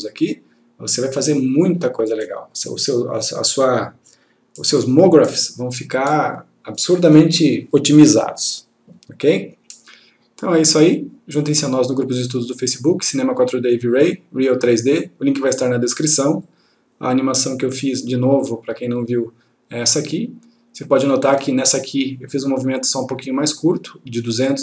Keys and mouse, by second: 16.6 click.